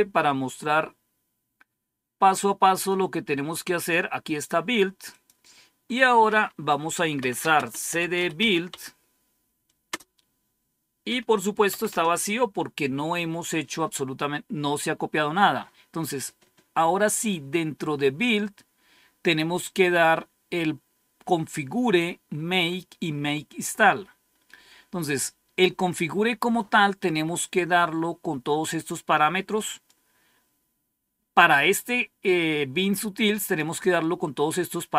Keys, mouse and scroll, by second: 2.8-4.0 drag, 5.0 click, 5.6 click, 6.8-8.8 typing, 9.8 typing, 11.2-11.9 typing, 18.3-19.0 scroll down 1, 20.0-20.4 scroll down 1, 29.7-33.5 drag.